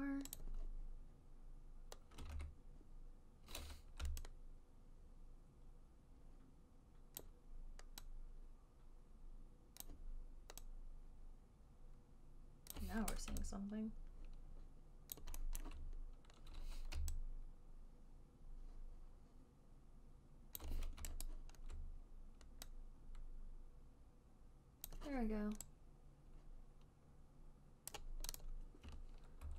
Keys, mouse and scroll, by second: 0.7 alt+click, 2.6 ctrl+z, 4.3-13.0 typing, 7.9-9.8 drag, 13.0 click, 15.4 alt+click, 15.4 typing, 15.9 alt+middle click, 17.2 j, 17.9 j, 17.9-20.9 j, 20.9 click, 21.0 j, 21.6 alt+click, 24.2 alt+right click, 25.2 click, 28.2 click, 28.7 click, 28.7 right click.